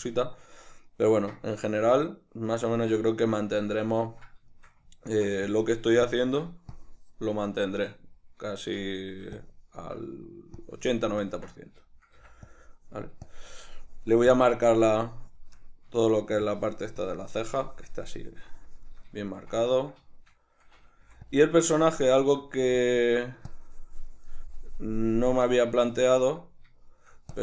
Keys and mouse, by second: 5.5-7.7 ctrl+drag, 7.7-9.4 shift+middle drag, 9.4-15.6 ctrl+drag, 12.2 c, 15.6 middle click, 16.5-19.2 drag, 19.2-21.4 shift+middle drag, 21.0 f, 21.4 click, 21.7-22.9 middle drag, 22.6 f, 23.1-25.5 drag, 25.5-27.3 middle drag, 27.3-27.4 drag.